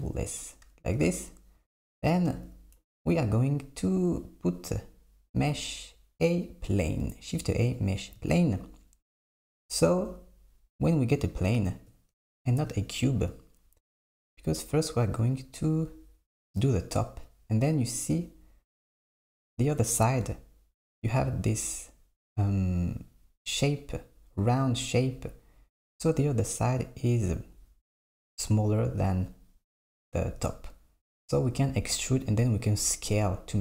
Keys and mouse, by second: 2.3 shift+a.